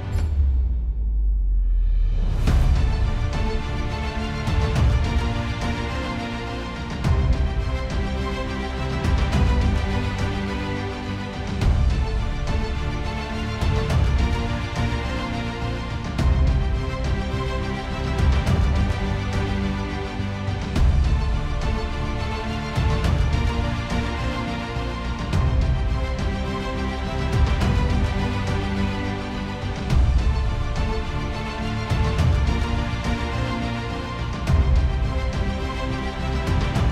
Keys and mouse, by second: 0.0 middle click, 1.3 middle click, 1.5 v, 2.7 middle click, 4.4 middle click, 5.5 middle click, 9.1 KP_1, 9.2 Return, 10.2 middle click, 12.1 KP_1, 12.3 Return, 18.8 middle click, 27.6 middle click, 30.1 middle click, 30.8 middle click, 32.7 ctrl+z, 34.1 ctrl+z.